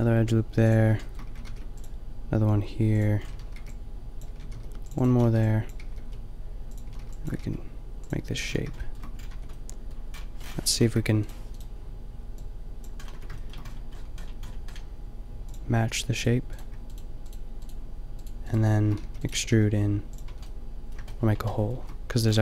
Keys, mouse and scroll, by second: 1.3 a, 1.5 ctrl+r, 3.4-7.3 typing, 4.6 ctrl+r, 8.3 a, 9.4 Tab, 10.9 KP_5, 12.6 click, 13.2 Tab, 15.5-16.5 middle drag, 19.1 e, 19.3 g, 20.1 click, 20.3 Tab, 20.7-22.4 middle drag.